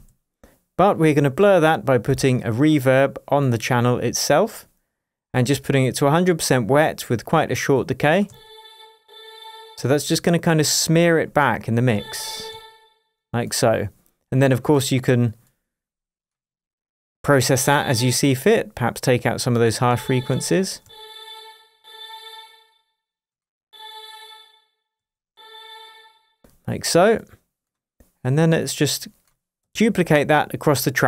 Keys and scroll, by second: 8.2 space, 11.9 space, 17.4 space, 19.8 space, 24.9 space, 29.7 super+d.